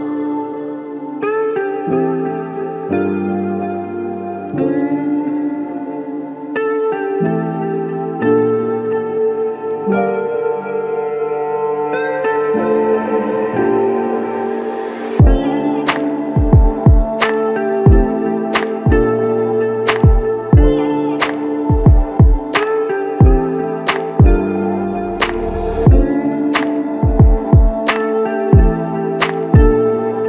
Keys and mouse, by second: 3.2 alt+click, 13.2 double click, 14.5 shift+click, 15.4 shift+click, 16.9 shift+click, 20.4 shift+click, 26.7 double click, 27.8 shift+click.